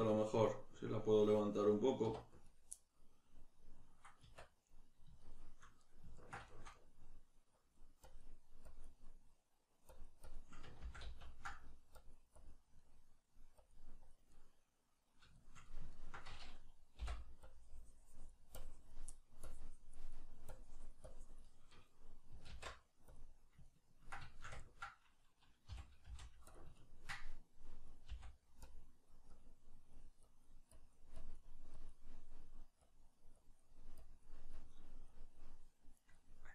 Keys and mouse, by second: 2.0 1, 2.4 right click, 4.2 Tab, 4.2-7.6 middle drag, 7.6-9.0 drag, 9.0 middle click, 9.9-11.5 drag, 10.8 ctrl+z, 11.5 middle click, 12.0 click, 12.8 middle click, 13.6 click, 14.3-17.4 middle drag, 17.4-19.1 drag, 19.1 middle click, 19.4 click, 20.1 middle click, 20.5-21.7 drag, 21.7-26.6 middle drag, 22.5 alt+q, 25.7 g, 26.6 click, 26.8 ctrl+middle click, 27.4-29.1 drag, 28.1 f, 36.1-36.5 middle drag.